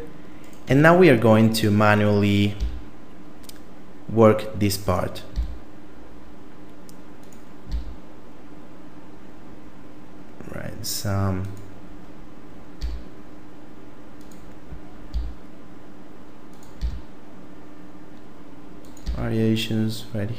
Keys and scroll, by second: 0.7 Tab, 2.6 e, 5.4 e, 7.7 e, 12.8 e, 15.1 e, 16.8 e, 19.0 e.